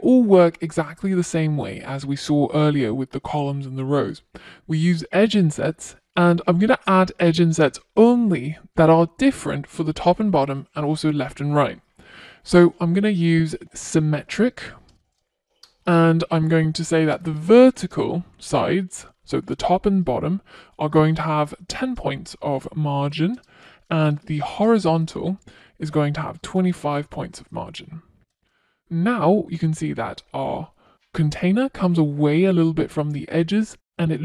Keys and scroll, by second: 2.4 Return, 13.1 Return, 22.9 Return, 25.9 Return.